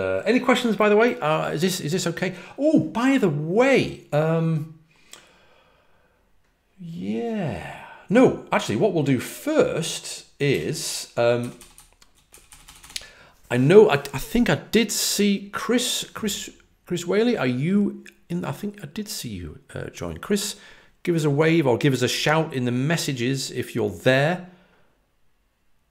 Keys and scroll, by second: 10.4 Return, 11.3-11.9 typing.